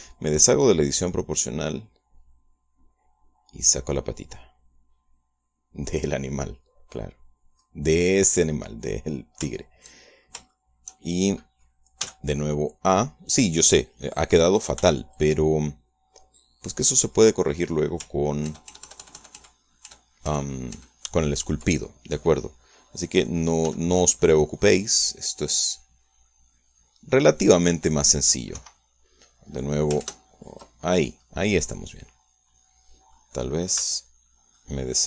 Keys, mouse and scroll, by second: 0.4 o, 1.8-9.4 drag, 10.4 shift+middle click, 11.4 shift+middle click, 12.9 a, 13.3-15.6 middle drag, 15.7 b, 16.1-18.4 drag, 19.4 ctrl+KP_Add, 24.6 c, 25.1-29.2 middle drag, 29.5 Escape, 31.0 ctrl+KP_Add, 32.2 scroll down 2, 32.6-34.2 middle drag, 34.7 c.